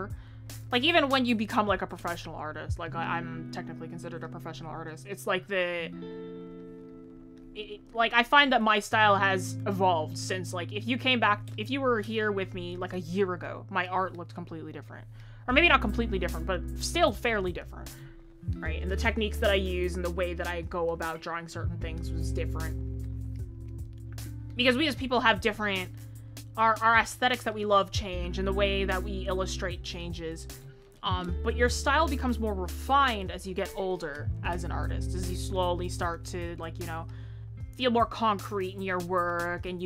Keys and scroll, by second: 13.5 ctrl+z, 19.4 ctrl+z.